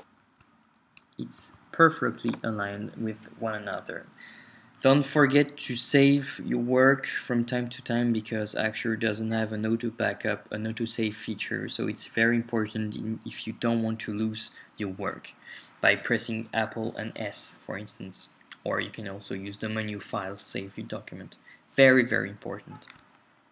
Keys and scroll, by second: 0.5 shift+Left, 1.4 Right.